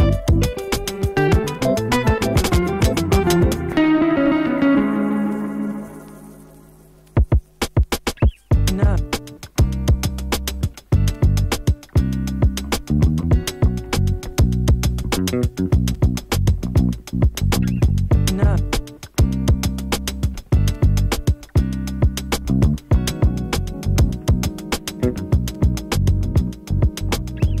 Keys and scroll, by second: 20.9 space.